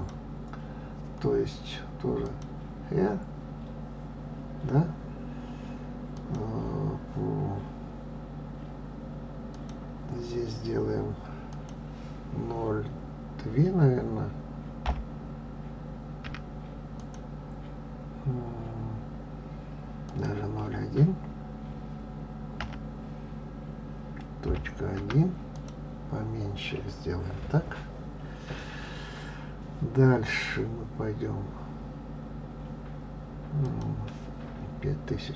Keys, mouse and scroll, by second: 0.7 click, 3.1 click, 7.0-10.0 drag, 12.3-15.4 drag, 20.9-24.0 drag, 34.5-35.3 drag.